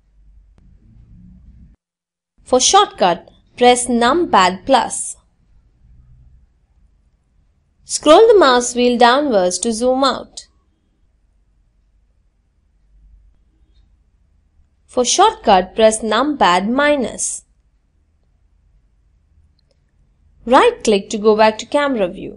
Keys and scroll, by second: 0.6 KP_Add, 13.1 KP_Subtract, 13.7 KP_Subtract.